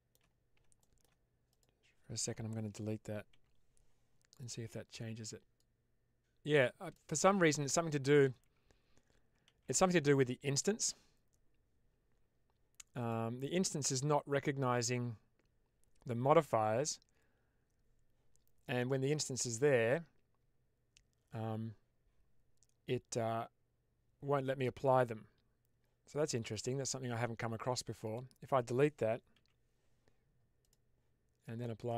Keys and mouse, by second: 0.7 shift+middle drag, 1.4 click, 4.2 click, 5.4-6.9 drag, 8.3 ctrl+z, 9.5 ctrl+z, 12.9 click, 14.7-15.7 drag, 26.4 click, 27.9 click, 29.3 Delete, 30.5 click, 31.7-31.9 drag.